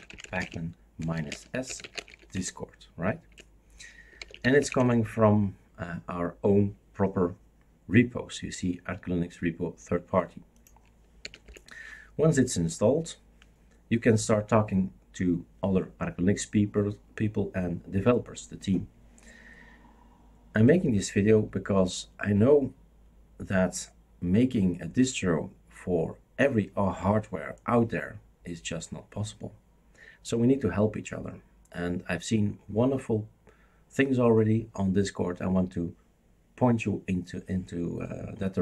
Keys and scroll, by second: 0.0-2.6 typing, 3.3 Return, 3.8-5.1 typing, 11.2 typing, 11.4 Return.